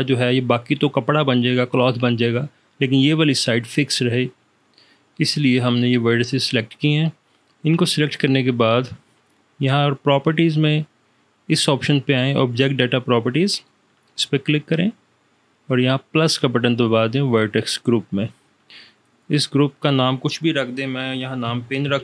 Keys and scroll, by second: 21.2 p, 21.9 n.